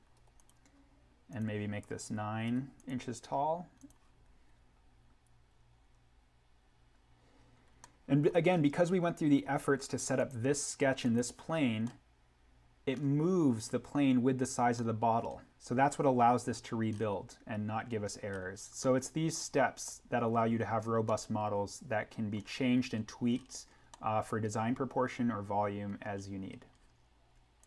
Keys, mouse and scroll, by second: 0.3 click, 2.4 9, 2.7 click, 7.6 scroll down 1, 7.7 middle click, 8.5-9.8 scroll up 1, 10.1 click, 11.7-12.1 scroll down 1, 12.1 scroll, 14.7 middle click, 15.0-15.3 scroll, 18.8 middle click, 19.0-19.3 scroll, 21.0 middle click, 21.2 scroll, 23.9-26.5 middle drag, 26.5-27.6 scroll up 1, 27.6 click.